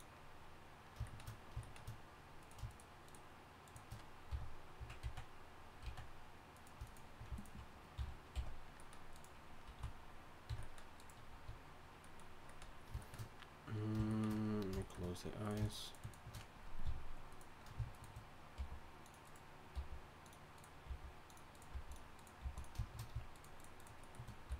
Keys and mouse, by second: 2.4-4.3 right drag, 4.3 f, 5.0 z, 5.8 z, 6.5-8.0 drag, 8.0 f, 8.3 s, 9.8 s, 11.3 a, 14.9 click, 15.4-17.5 right drag, 16.8 f, 17.5-18.5 right drag, 18.5 g, 19.7 g, 20.9 g, 21.7 g, 22.4 g.